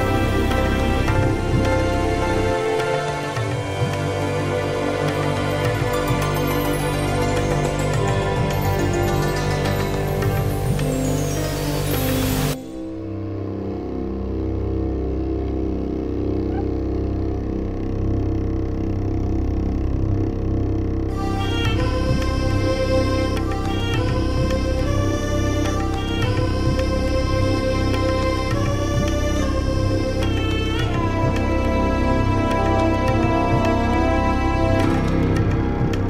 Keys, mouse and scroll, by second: 1.9 click, 4.0 click, 8.2 click, 11.1 click, 13.4 click, 14.7 ctrl+c, 15.7 click, 19.9 ctrl+scroll up 2, 20.6-20.9 ctrl+scroll up 2, 22.2 ctrl+scroll down 2, 26.4 ctrl+scroll down 2, 27.4-27.8 ctrl+scroll up 2, 29.2 click, 30.1 click, 33.2 ctrl+v.